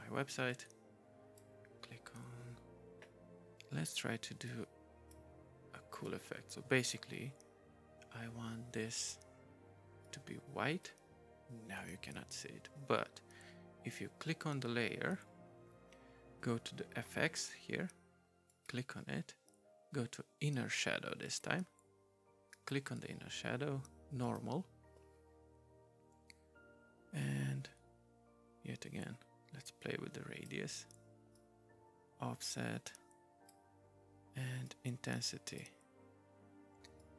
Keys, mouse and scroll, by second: 0.5 click, 4.5 right click, 6.1 right click, 9.0 right click, 10.0 right click, 11.8 right click, 12.3 right click, 18.5 right click, 24.2 right click, 27.2 right click, 31.3 right click, 34.7 right click, 37.0 right click.